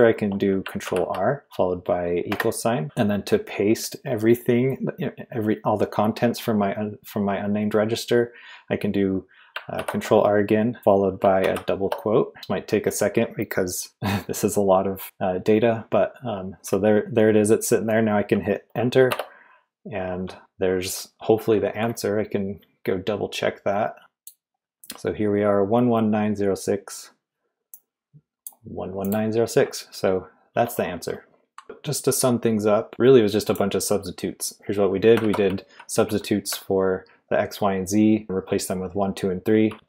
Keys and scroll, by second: 0.8 ctrl+r, 2.3 =, 9.7 ctrl+r, 11.4 shift+', 19.1 Return, 21.3 Escape, 31.6 typing, 35.4-36.0 typing, 39.7-39.8 typing.